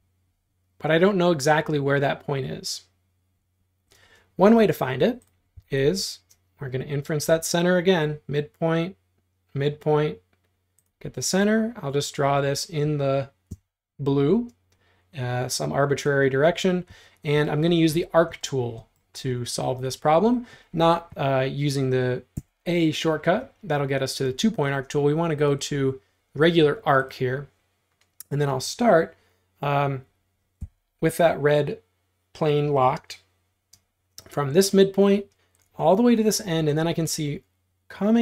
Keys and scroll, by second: 3.8 Escape, 4.0 space, 5.6 l, 13.5 Up, 16.3 space, 22.4 a, 24.3 space, 30.6 Tab.